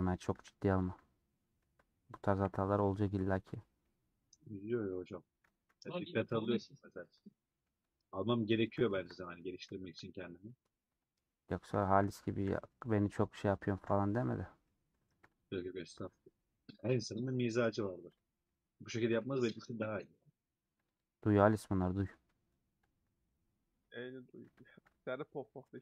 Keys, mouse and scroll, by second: 0.9 alt+click, 2.4 KP_Decimal, 3.0 scroll down 1, 3.1 scroll up 1, 3.1 scroll down 1, 3.2 scroll up 1, 3.6 scroll down 1, 3.8-5.4 middle drag, 5.4 alt+z, 5.7 middle click, 6.3 alt+z, 6.4 middle click, 7.0 2, 7.3 middle click, 7.8 3, 8.4 middle click, 9.0-9.7 scroll up 2, 9.2 middle click, 9.7 shift+middle click, 10.6 alt+click, 11.2 alt+click, 11.8-13.9 middle drag, 13.9 ;, 14.3-15.5 middle drag, 15.5 alt+click, 15.9 middle click, 16.9 scroll down 2, 17.2-18.3 middle drag, 18.3 click, 18.4 middle click, 19.0 2, 19.7-21.0 middle drag, 21.0 click, 22.0 click, 24.0 click, 24.5 middle click, 24.8 alt+z.